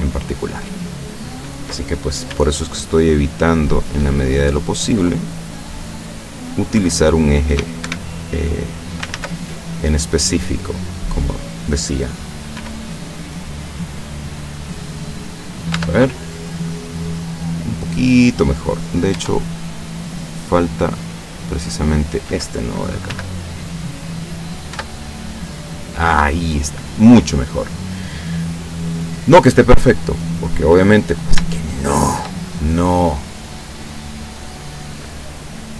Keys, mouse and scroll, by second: 0.0 scroll up 1, 1.5 middle click, 2.3 g, 4.0 click, 4.3-5.3 middle drag, 6.3 right click, 6.8 g, 7.9 Escape, 8.2 click, 9.2 ctrl+z, 9.5 ctrl+middle click, 10.8 right click, 11.1 middle click, 12.6 g, 14.1 click, 14.6 middle click, 15.8 Tab, 16.1-17.7 middle drag, 17.7 middle click, 19.2 Tab, 19.9-22.2 middle drag, 23.2 g, 24.3 click, 24.8 Tab, 25.2-26.4 middle drag, 26.4 scroll down 2, 26.9-28.3 middle drag, 28.3-28.8 scroll down 2, 28.8 scroll up 2, 29.0-29.7 middle drag, 29.7-30.2 scroll up 2, 30.2 scroll up 1, 30.5-31.5 middle drag, 31.7-32.5 shift+middle drag, 32.6-35.3 shift+middle drag.